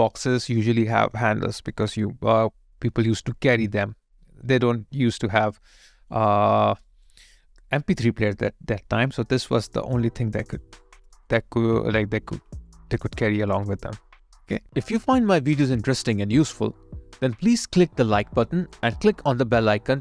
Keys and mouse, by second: 0.6 alt+click, 1.7 alt+right click, 6.8 alt+right click, 7.3 alt+click, 9.7 alt+middle click, 10.2 alt+click, 10.8 alt+right click, 11.3 alt+click, 13.0 alt+click, 13.7 alt+right click, 14.4 alt+middle click, 15.4 alt+click.